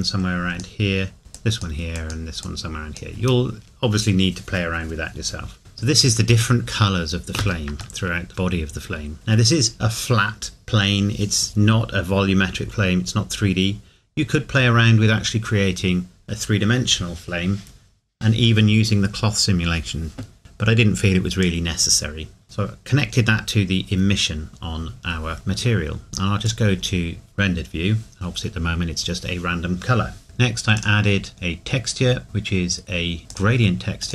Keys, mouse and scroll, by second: 7.8 click, 8.0 shift+middle click, 21.4 click, 25.3 middle click, 26.5 click, 30.7 click, 33.3 click.